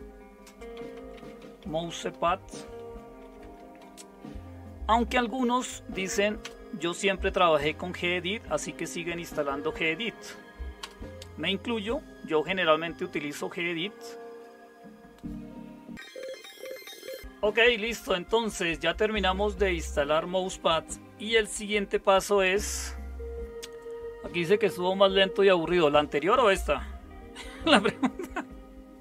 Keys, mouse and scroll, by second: 0.0-4.3 typing, 6.4 typing, 10.8 Return, 28.1 super+7.